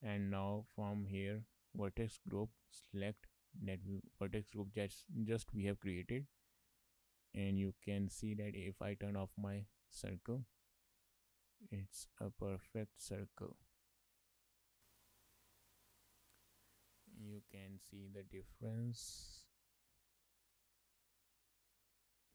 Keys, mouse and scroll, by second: 2.1 click, 4.5 shift+middle click, 4.9 middle click, 6.4 shift+middle click, 6.7 middle click, 7.9 shift+middle click, 8.1 middle click, 9.9 click, 10.4 shift+middle click, 10.6 middle click, 11.5 shift+middle click, 12.0 scroll down 2, 12.2 shift+middle click, 12.5 middle click, 13.0 shift+middle click, 13.4 middle click, 14.8 shift+middle click, 15.5 scroll down 1, 15.8 shift+middle click, 16.1 middle click, 17.4 middle click, 19.6 click, 21.2 click, 22.2 click.